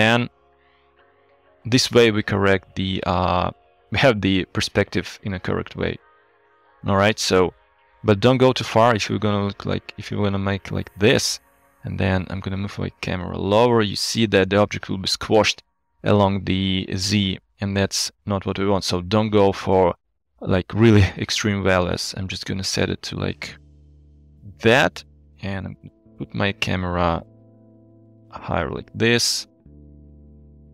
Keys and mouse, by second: 3.2 shift+middle drag, 7.2 shift+middle drag, 8.4-11.1 drag, 12.3 g, 12.3 z, 21.9-24.8 shift+drag, 25.5 g, 25.6 z, 29.0 shift+click, 30.6 g.